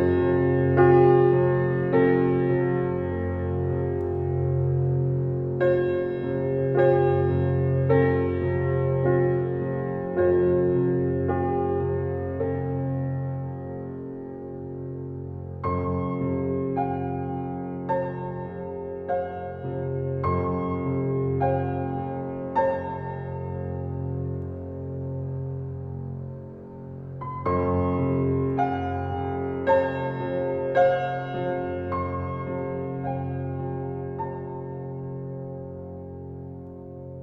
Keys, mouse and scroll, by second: 0.4-0.7 typing, 2.3 click, 2.9-3.3 scroll up 1, 6.5 click, 7.9 right click, 8.8 click, 9.1-9.6 scroll down 1, 10.9-11.4 scroll up 1, 11.8 click, 14.1-14.8 scroll down 1, 14.8 scroll down 1, 15.2-16.1 scroll up 2, 16.3 right click, 17.0 click, 17.6-18.0 scroll down 1, 18.7-19.0 scroll up 1, 20.2 click, 21.7-22.3 scroll down 1, 22.3 scroll up 1, 22.8 click, 23.5 scroll down 1, 24.5 scroll up 1, 24.8 scroll down 1, 25.3 scroll up 1, 26.1 click, 27.9-28.4 scroll down 1, 28.4 scroll up 1, 29.8 click, 30.6-31.9 typing, 32.4 Return, 32.9 click, 33.3-33.9 scroll down 1, 33.9-34.3 scroll up 1, 36.3-36.7 scroll up 1, 36.7-37.1 scroll down 1.